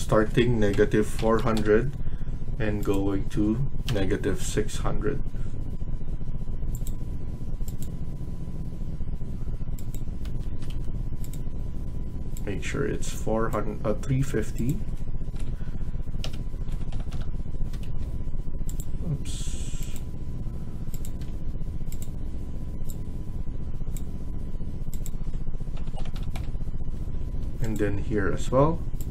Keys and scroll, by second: 0.4-1.8 typing, 3.7-4.8 typing, 10.1 Escape, 10.4 Escape, 10.6 Escape, 15.3 Return, 16.1-17.6 typing, 17.7 Escape, 20.9 Escape, 21.0-21.7 typing, 25.5-26.6 typing, 26.8 Escape, 27.2 Escape.